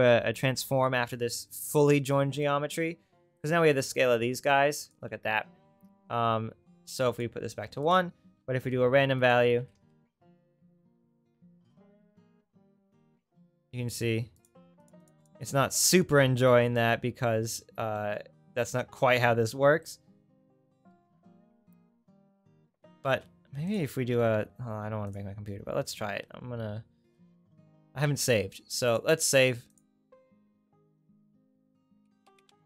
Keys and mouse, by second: 3.4 click, 4.2 click, 4.4-7.9 drag, 5.2 ctrl+z, 8.5 shift+a, 12.1-21.3 drag, 22.4 ctrl+x, 23.1 shift+a, 28.9-32.6 drag.